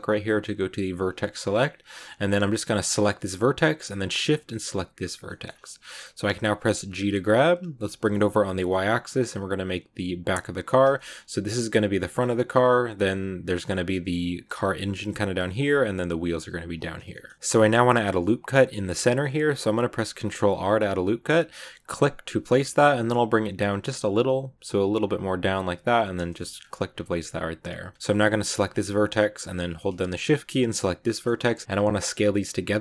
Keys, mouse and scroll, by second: 2.8 right click, 4.8 shift+right click, 5.2 shift+middle click, 5.4 scroll down 2, 6.1-6.9 scroll up 1, 6.9 g, 10.8 shift+middle click, 11.0 scroll up 1, 17.0 shift+middle click, 17.3 click, 20.1 ctrl+r, 26.2 shift+middle click, 26.4 scroll up 2, 28.3 right click, 30.9 shift+right click.